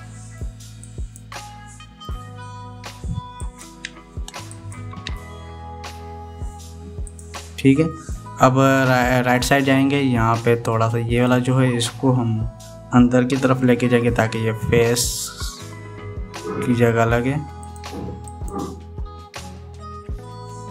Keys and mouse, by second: 1.7 click, 4.1 click, 4.6 g, 5.5 click, 5.8 g, 10.1 KP_3, 11.4 click, 14.4 g, 19.3-20.7 drag.